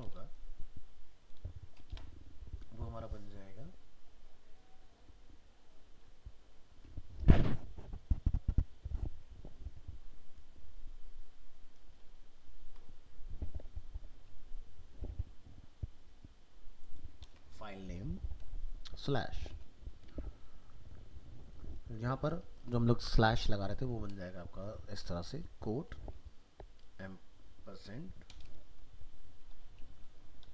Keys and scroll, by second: 12.6 ctrl+c, 17.2 ctrl+v.